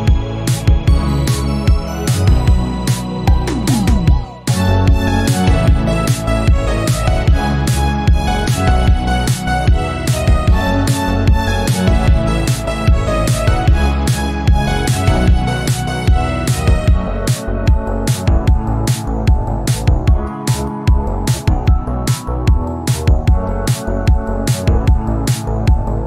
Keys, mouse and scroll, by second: 0.5 KP_3, 1.1 click, 1.3 scroll down 1, 1.5 scroll up 1, 2.4 shift+a, 6.0 click, 6.9 Delete, 7.4 shift+a, 9.0 click, 9.6 shift+middle click, 10.2 click, 10.5 scroll up 1, 10.9 click, 12.6-13.2 scroll down 2, 13.2 s, 16.7 click, 16.9 scroll down 2, 17.1 middle click, 17.5 scroll up 2, 17.8-20.6 drag, 20.6 right click, 21.3 click, 21.7-23.1 shift+middle drag, 23.2 click, 23.5-24.7 drag, 24.7 n, 25.4-26.0 drag.